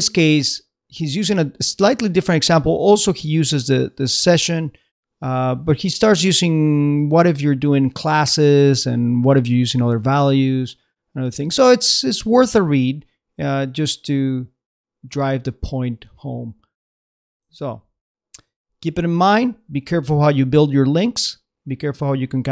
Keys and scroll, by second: 17.6 super+Tab.